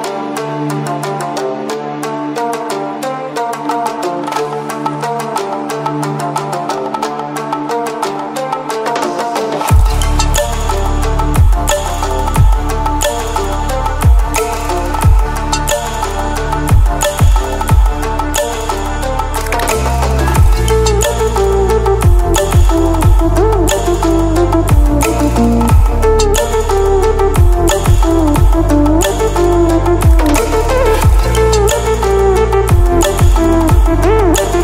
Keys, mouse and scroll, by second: 1.4 click, 8.3-11.0 drag, 12.8 ctrl+w, 15.5 ctrl+w, 16.8 click, 17.4 ctrl+w, 25.5 ctrl+w, 27.0 Down.